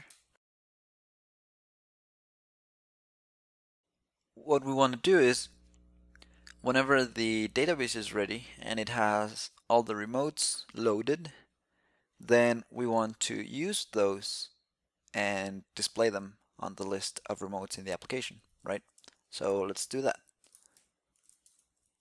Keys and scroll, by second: 0.6 alt+c.